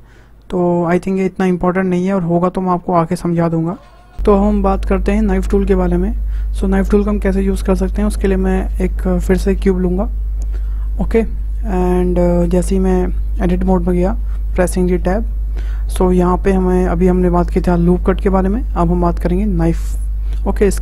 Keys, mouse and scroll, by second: 8.7 shift+a, 10.5-10.8 scroll up 2, 10.8-13.7 shift+middle drag, 13.7 Tab, 14.5-17.6 shift+middle drag, 20.7-20.8 drag.